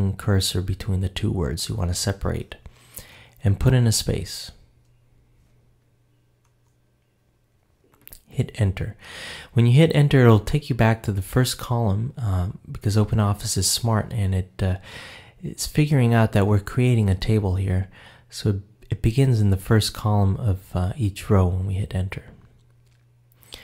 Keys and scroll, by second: 6.4 Return.